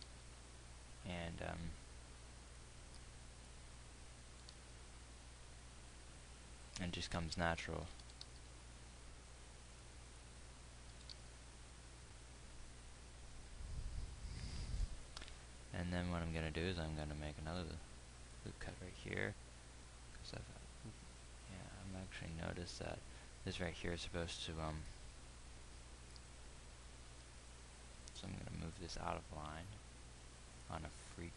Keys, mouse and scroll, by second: 0.3 g, 4.9 g, 8.6 g, 11.4 g, 17.0 ctrl+r, 27.4 g.